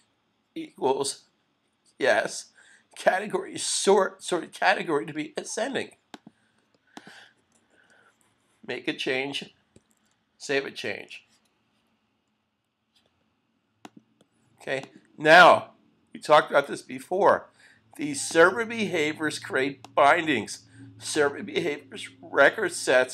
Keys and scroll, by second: 9.8 super+s.